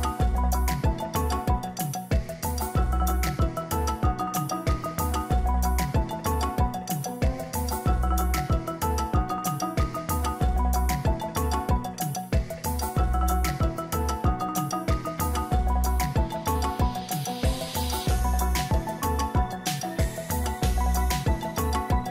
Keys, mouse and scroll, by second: 15.1 Down, 16.3 Down, 21.2 ctrl+click.